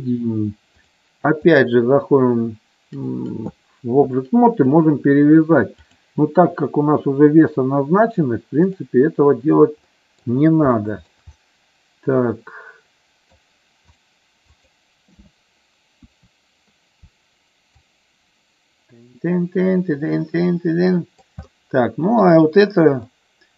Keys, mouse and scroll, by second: 0.8 click, 5.7-8.7 drag, 9.9 middle click, 10.8 shift+middle click, 11.4-13.2 middle drag, 16.1 KP_1, 17.9-21.2 drag, 21.5 middle click, 23.1 middle click.